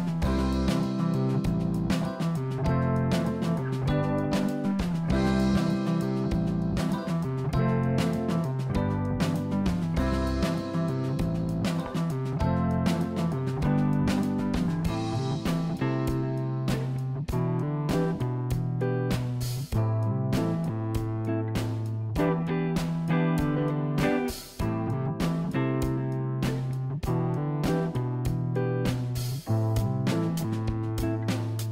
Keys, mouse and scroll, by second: 0.0 Tab, 0.3 Tab, 2.1-3.7 drag, 6.0 click, 7.1 click, 10.0-11.7 drag, 12.2 click, 15.1 Delete, 18.0 Tab, 18.4 click, 18.8 Tab, 20.0 click, 20.8 click, 21.0 click, 21.1 click, 22.8 e, 25.0 ctrl+z, 26.9 s, 28.1 ctrl+z, 28.7 e.